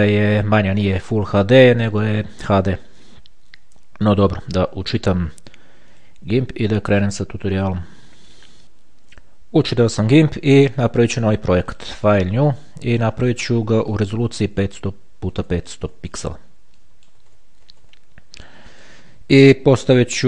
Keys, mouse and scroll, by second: 4.6-5.2 scroll down 2, 6.2 click, 8.5 click, 11.2 click, 12.0 click, 13.3 click, 15.6 KP_5, 16.4 click, 16.4 KP_0, 17.4 click, 17.5 KP_5, 17.8 KP_0, 18.9 click.